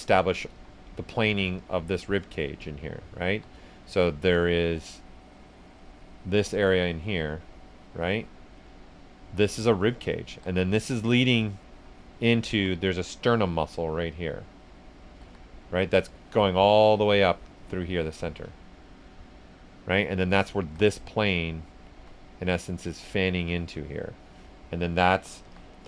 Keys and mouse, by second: 0.4 s, 0.5 click, 3.2 s, 3.3 click, 3.8 right click, 4.7-6.7 drag, 6.7-8.6 drag, 8.6 right click, 9.3 click, 10.2 s, 10.4 click, 10.8 right click, 11.3 click, 12.5 s, 12.5-15.2 drag, 15.2 s, 15.3-18.5 drag, 18.5 ctrl+right click, 19.0 right click, 20.3 click, 20.6 s, 20.7 click, 21.9 s, 22.0-25.4 drag, 25.4 s, 25.5 click.